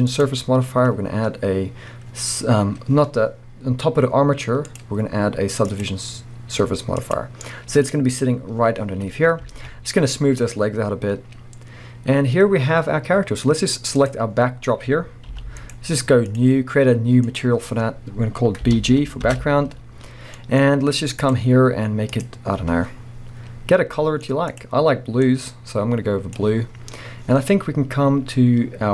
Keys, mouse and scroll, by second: 9.5 alt+a, 10.4-12.5 scroll down 1, 13.1 scroll up 1, 14.1 click, 14.4-14.7 scroll down 1, 15.3 g, 15.8 right click, 16.4-22.1 drag, 20.4 Return, 23.0 scroll up 1, 25.3 click.